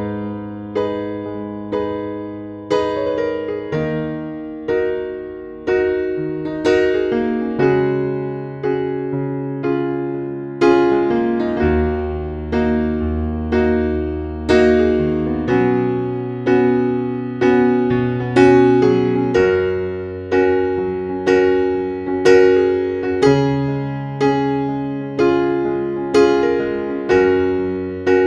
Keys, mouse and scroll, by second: 6.9 scroll up 1, 7.6-9.7 drag, 10.6 ctrl+a, 11.5 KP_3, 13.4-19.7 drag, 20.0 scroll down 1, 22.4-22.8 scroll up 1, 23.5 click, 27.8 a.